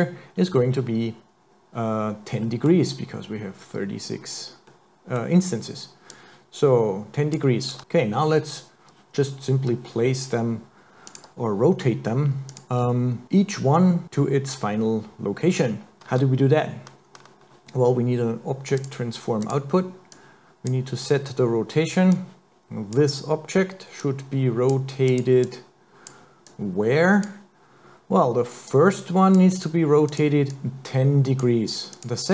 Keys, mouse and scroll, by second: 2.4 middle click, 4.7 middle click, 6.1 click, 7.7 click, 11.1 click, 12.5 click, 16.0 click, 16.1 shift+a, 20.2 click, 22.2 click, 24.0 click, 25.1 click, 25.4 click, 26.5 click, 28.7 click, 30.1 click, 30.5 click, 32.0 click.